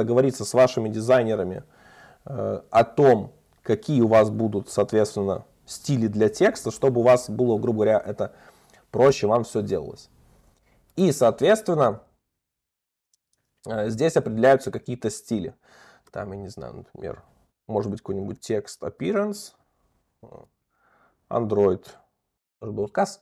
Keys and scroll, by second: 16.2 Return, 20.2 alt+Up.